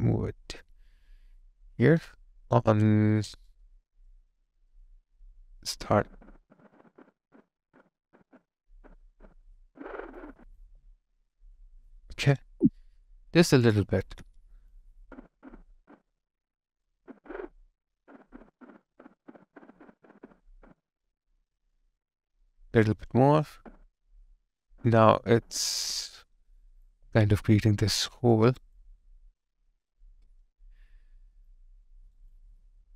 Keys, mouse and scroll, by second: 2.1 alt+right click, 2.9 alt+click, 3.5 alt+right click, 5.3 space, 10.6 alt+click, 12.4 ctrl+z, 13.2 space, 26.9 alt+click, 28.4 alt+right click, 28.8 alt+click, 31.9 alt+right click, 32.4 alt+click.